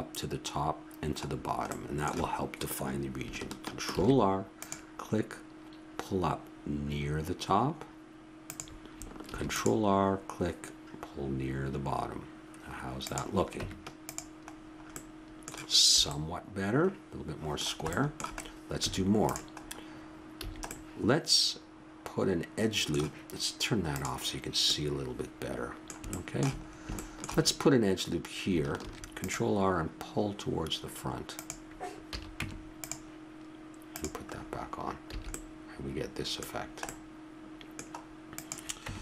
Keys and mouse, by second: 1.3-3.3 middle drag, 3.9 ctrl+r, 9.3 ctrl+r, 13.6 Tab, 14.5 middle click, 16.0 a, 18.8 Tab, 20.4 a, 24.7-26.1 middle drag, 28.8 ctrl+r, 32.1 a, 32.4 Tab, 33.9-35.6 drag, 35.1 a, 36.5-38.4 middle drag, 38.4 right click, 38.8 Tab.